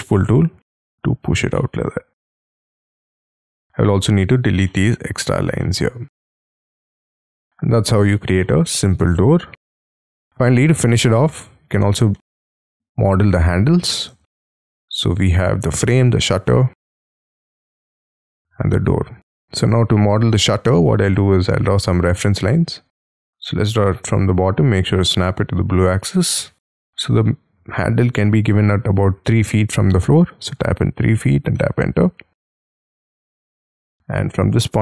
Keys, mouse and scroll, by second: 1.6 middle click, 3.0 e, 4.7 middle click, 5.6 middle click, 6.8 middle click, 7.4 middle click, 8.9 scroll down 1, 9.3 Escape, 9.4 scroll up 2, 9.5 Escape, 11.0 double click, 12.1 middle click, 14.1 j, 14.5 middle click, 16.7 double click, 19.5-19.9 scroll up 6, 20.0 middle click, 20.6 scroll down 3, 20.9 t, 23.3 ctrl+z, 25.2 Up, 30.1-31.0 typing, 31.6 Return, 32.6 middle click, 33.6 middle click, 34.1-34.8 scroll up 3.